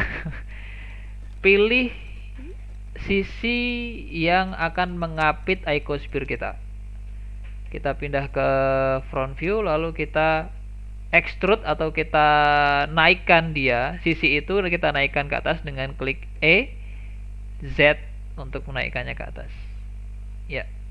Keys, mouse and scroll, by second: 1.7 click, 3.5 shift+click, 7.7 KP_1, 9.0-12.0 shift+middle drag, 16.4 e, 20.6-20.9 scroll down 1.